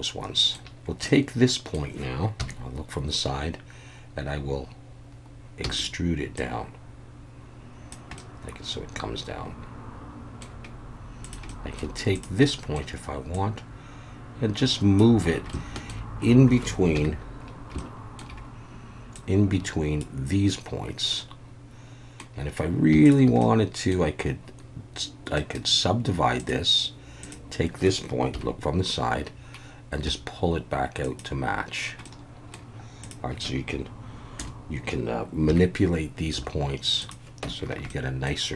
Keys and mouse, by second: 0.8 z, 1.1 middle click, 2.4 KP_3, 5.6 e, 5.8 click, 6.4-7.9 drag, 8.3-10.4 middle drag, 11.2 click, 11.6 middle click, 12.4 middle click, 13.4-15.0 drag, 15.6 shift+middle click, 16.9 KP_3, 17.9 shift+middle click, 19.1 click, 21.3 middle click, 23.0 shift+click, 23.4 middle click, 25.5-26.5 drag, 27.2 click, 28.3 KP_3, 30.1 g, 31.0 click, 32.0 middle click, 34.4 KP_Enter, 35.5 KP_3, 36.4 g, 37.0 click, 37.4 Tab, 37.9-38.3 middle drag.